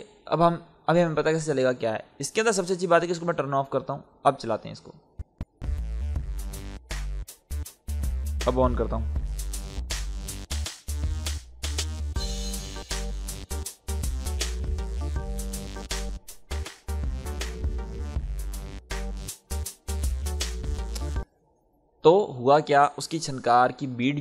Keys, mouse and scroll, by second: 5.5 space, 8.9 click, 15.8 click, 18.7 click, 18.8 click, 21.1 space.